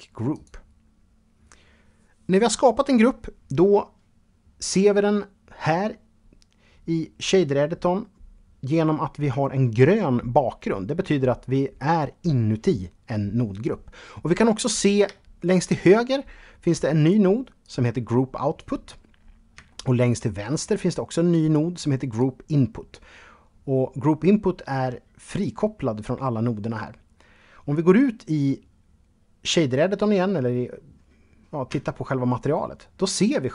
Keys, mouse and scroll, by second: 13.5-13.9 scroll up 2, 14.3 shift+middle click, 15.2-15.6 scroll up 3, 16.2 click, 16.8 click, 18.1-18.7 scroll down 2, 18.9 shift+middle click, 20.5 click, 21.3 click, 25.6-27.4 scroll down 3, 28.0 scroll down 1, 30.9 Tab, 32.0-32.7 scroll up 3.